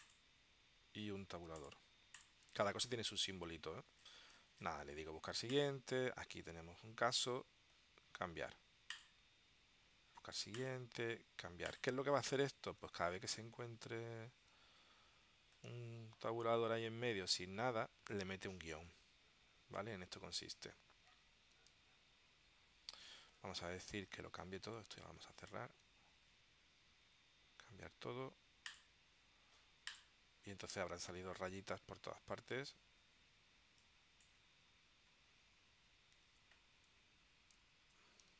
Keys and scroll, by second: 25.0 super+q, 36.3 super+Tab.